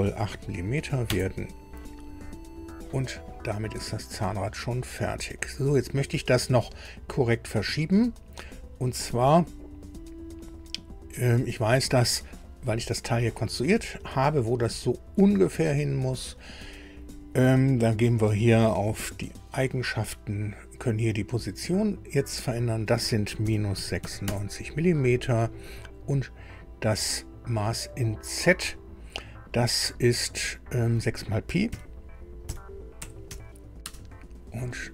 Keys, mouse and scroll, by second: 0.0 KP_8, 1.0 KP_Enter, 5.4 click, 18.8 click, 22.4 click, 23.4 KP_Subtract, 23.8 KP_9, 24.0 KP_6, 24.2 KP_Enter, 28.7 click, 30.3 click, 31.6 KP_6, 33.0 p, 33.2 i, 33.8 Return.